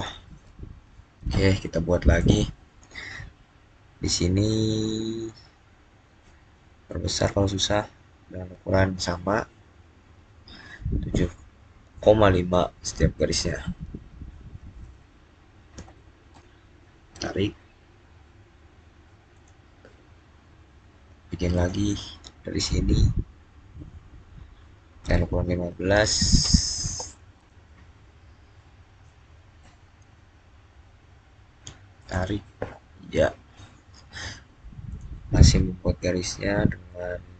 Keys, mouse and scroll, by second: 2.0 click, 6.4 click, 8.1-8.5 scroll up 1, 13.2 7, 15.6 5, 16.2 Return, 17.3-19.1 scroll down 1, 19.2 click, 21.4 click, 26.2-26.7 typing, 27.2 Return, 28.1-28.9 scroll down 1, 28.9-31.7 middle drag, 31.9 click, 34.8 click, 36.8-37.2 scroll up 1.